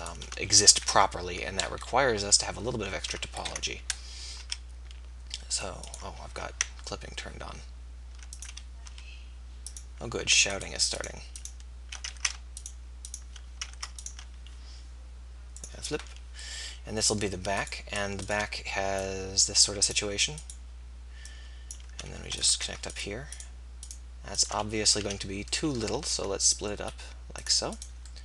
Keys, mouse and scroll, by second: 0.7 KP_3, 1.9 KP_1, 4.5 e, 7.0 ctrl+z, 8.9 click, 8.9 e, 10.1 click, 10.5-12.4 drag, 12.2 ctrl+z, 13.8 ctrl+z, 21.1-22.9 right drag, 23.3-25.2 right drag, 25.2 f, 26.0 ctrl+r, 26.0-27.5 right drag.